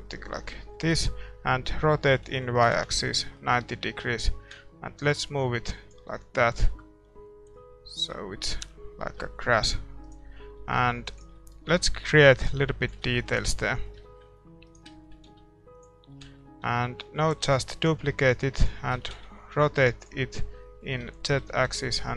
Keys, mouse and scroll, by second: 0.1-2.7 middle drag, 1.7 r, 3.3-5.0 middle drag, 4.2-5.9 drag, 6.1 scroll up 1, 6.3-9.2 middle drag, 7.5-9.2 drag, 9.4-18.5 middle drag, 9.7 a, 10.7 ctrl+r, 10.7-11.9 right drag, 12.3-14.0 drag, 13.5 a, 14.6-16.4 right drag, 15.2 s, 16.6 a, 17.0 a, 17.4 shift+d, 18.3-20.0 drag, 18.9 r, 20.2-22.1 middle drag, 21.4 r.